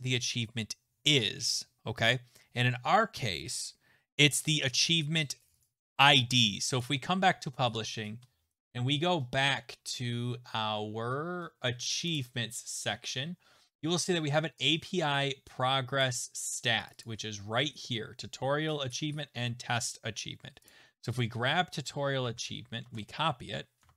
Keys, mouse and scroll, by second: 0.4 scroll, 5.5 click, 5.6 click, 6.8 click, 8.6 right click, 12.2 click, 16.0 click, 16.9 click, 17.0 click, 20.7 click, 21.1 click, 21.2 click, 22.2 ctrl+c, 22.8 alt+Tab, 23.9 alt+Tab.